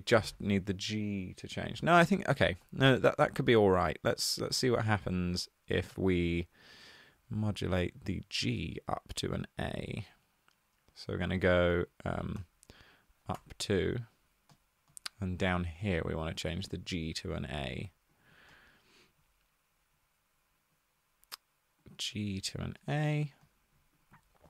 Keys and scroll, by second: 2.6-3.2 typing, 13.2 2, 13.3 Return.